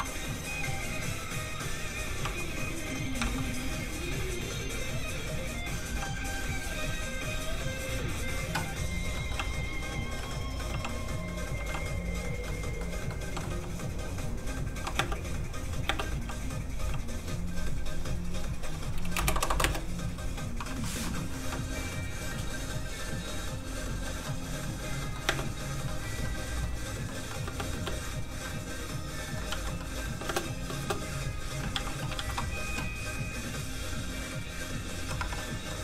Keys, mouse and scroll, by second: 1.9 z, 2.0 r, 3.0 click, 3.1 g, 3.2 z, 5.9 click, 5.9 g, 6.4 click, 8.9 scroll down 1, 9.1 middle click, 9.3 g, 10.0 click, 10.2 middle click, 10.7 g, 11.5 g, 11.6 g, 12.2 click, 12.2 click, 12.4 middle click, 12.8 scroll up 1, 13.1 middle click, 13.4 g, 14.5 click, 14.9 space, 16.1 g, 16.4 click, 16.8 g, 17.0 click, 19.1 BackSpace, 19.3 KP_0, 19.6 Return, 20.8 shift+middle click, 21.1 middle click, 21.2 middle click, 21.4 g, 24.2 middle click, 24.2 click, 25.2 space, 25.8 middle click, 27.4 space, 28.4 middle click, 29.5 ctrl+s, 29.8 middle click, 30.1 ctrl+space, 31.7 alt+shift+z, 33.3 alt+click, 33.4 click, 35.2 1, 35.7 middle click.